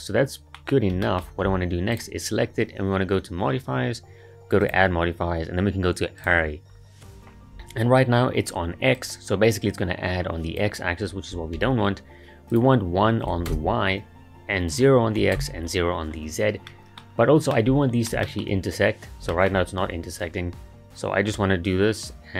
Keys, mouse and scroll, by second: 0.7-1.0 scroll up 2, 1.0-1.9 shift+middle drag, 1.9 click, 6.2-7.6 drag, 9.0-11.6 drag, 11.6 ctrl+z, 12.5-16.7 drag, 16.7-17.1 middle drag, 17.1-17.5 scroll up 3, 17.5-18.6 middle drag, 18.6-19.3 scroll up 1, 19.3-19.7 shift+middle drag, 19.7-21.3 scroll up 1, 21.3-22.3 drag.